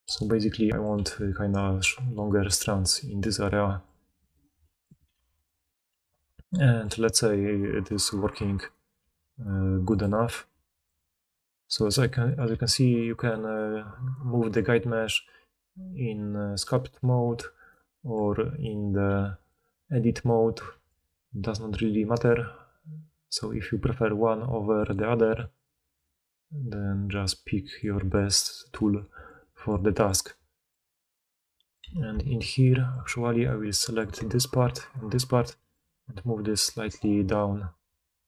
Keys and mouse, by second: 0.1-4.3 middle drag, 1.2 d, 1.5 d, 4.3 click, 4.4 middle click, 5.1 2, 5.3 click, 5.4-8.6 middle drag, 8.6 click, 9.0-11.3 middle drag, 9.0 g, 11.3 click, 11.4 middle click, 11.8 click, 11.9-13.4 middle drag, 12.5 g, 13.4 click, 14.0 click, 14.9 g, 17.3 1, 17.6 click, 17.7 middle click, 18.5 click, 18.6-19.8 middle drag, 19.1 g, 19.8 click, 19.9 middle click, 20.1 click, 20.3-22.7 middle drag, 20.7 g, 25.6 click, 26.1 click, 26.7 g, 26.9-31.2 middle drag, 31.2 click, 31.5 middle click, 32.3 alt+click, 33.3 alt+click, 34.1 alt+middle click, 34.8 alt+shift+click, 34.9-38.2 alt+shift+middle drag, 36.0 g.